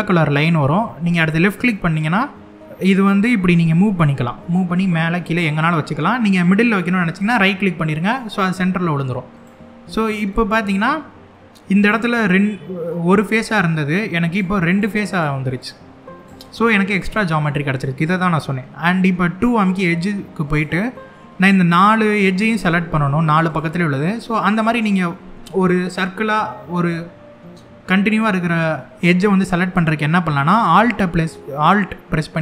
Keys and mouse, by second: 7.7 right click, 9.0 click, 10.0 middle click, 11.5 click, 13.7 3, 14.0 click, 14.3 click, 14.8 click, 16.0 click, 16.6 middle click, 20.2 click, 20.6 middle click, 22.2 click, 23.2 click, 24.0 middle click.